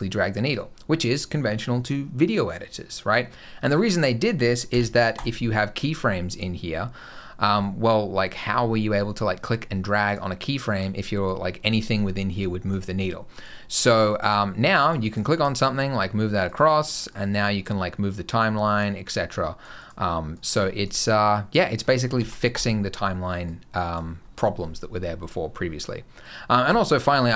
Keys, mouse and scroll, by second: 4.6 i, 5.8 click, 9.9 click, 11.1 click, 13.3 click, 14.7 click, 15.2 g, 17.0 click, 19.1 click, 20.2 click, 22.0 x, 23.3 click.